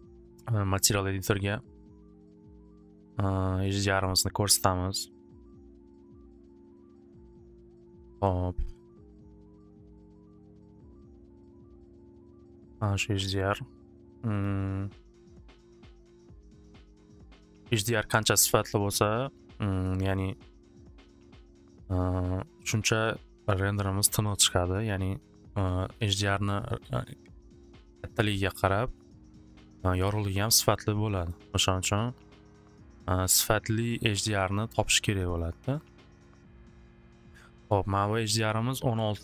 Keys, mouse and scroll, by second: 0.5 click, 1.2 click, 2.0 click, 3.7 click, 5.3 click, 6.0 click, 6.2 click, 7.2 click, 12.7 click, 14.4 click, 18.8 right click, 31.3 click, 33.6 click, 35.3 click.